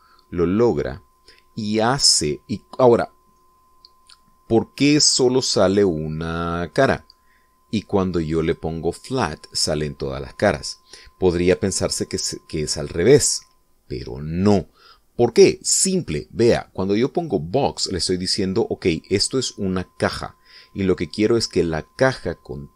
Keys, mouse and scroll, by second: 0.1 middle click, 1.0-4.7 middle drag, 5.7 scroll down 2, 6.1-8.5 middle drag, 9.6 click, 10.3 click, 17.2 click, 18.4 click, 19.2 middle click, 20.6-22.1 middle drag.